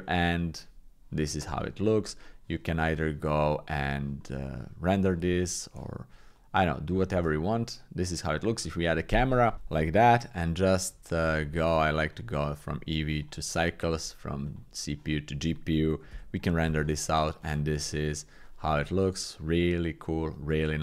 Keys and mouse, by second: 1.5 middle click, 2.2-3.6 middle drag, 4.2 middle click, 5.3 middle click, 6.4 click, 7.2 shift+space, 7.4 click, 12.7 click, 13.9 click.